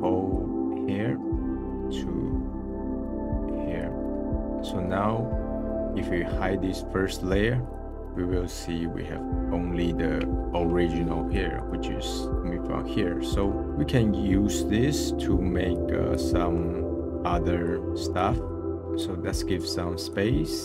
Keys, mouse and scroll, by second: 0.0 click, 4.2 click, 4.9 middle click, 5.2-7.6 scroll up 1, 7.6 click, 7.8-11.2 middle drag, 11.2-12.8 drag, 12.8 scroll down 1, 13.1-15.7 middle drag, 15.7 click, 16.3-17.7 middle drag, 17.7 click, 18.4 click, 18.6 click, 19.7 click, 20.3 scroll down 1, 20.5 middle click.